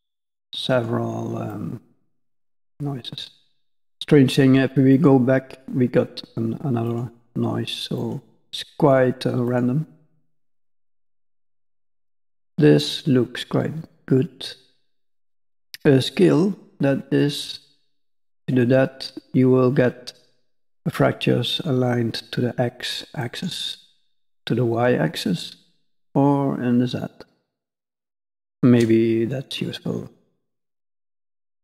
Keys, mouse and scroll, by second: 0.7 click, 1.5 middle click, 4.9 click, 6.8 click, 7.9 click, 9.4 click, 10.4 click, 11.4 middle click, 17.1 click, 23.9 click, 26.0 click.